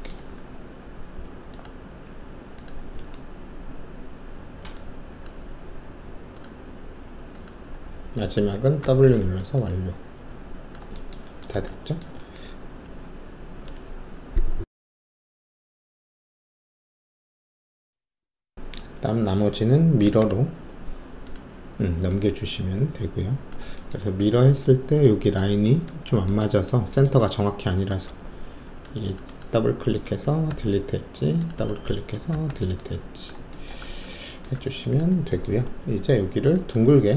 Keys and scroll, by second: 8.8 alt+w, 12.6 alt+`, 20.0 ctrl+e, 28.0 alt+2, 30.4 alt+q, 32.3 alt+q, 34.5 alt+`, 36.9 alt+w.